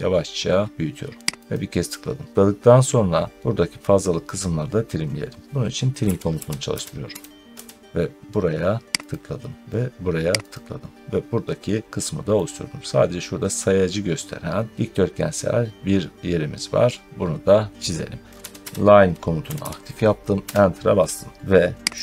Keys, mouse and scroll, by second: 1.4 click, 2.3 scroll, 2.6 scroll down 3, 3.1 scroll up 1, 4.7 scroll up 1, 5.6-7.5 typing, 8.9 click, 10.4 click, 11.2 middle click, 11.3 middle click, 12.1 scroll, 12.2 middle click, 12.8 scroll down 1, 16.8 middle click, 18.0-19.9 typing, 18.2 click, 20.3 Return, 21.3 typing, 21.9 click.